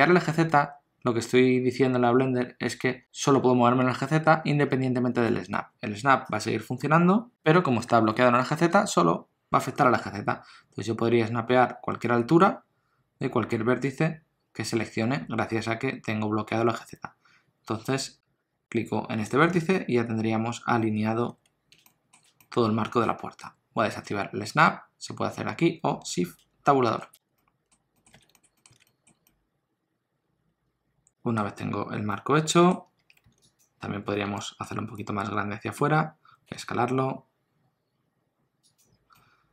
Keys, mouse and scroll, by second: 21.0 alt+z, 21.8 shift+middle click, 22.4 middle click, 26.8 shift+Tab, 27.3 middle click, 27.8 scroll down 1, 27.9 middle click, 28.1 alt+z, 28.3 shift+middle click, 28.6 middle click, 28.7 alt+z, 28.8 middle click, 32.1 middle click, 33.0 2, 33.4 alt+click, 34.4 shift+middle click, 34.9 middle click, 39.1 middle click.